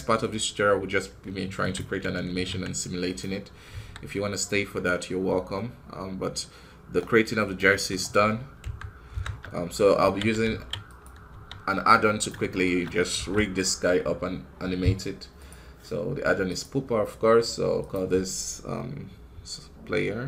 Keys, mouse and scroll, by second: 1.6 z, 2.9 click, 3.6 KP_1, 7.0-11.1 drag, 12.5-16.4 shift+middle drag.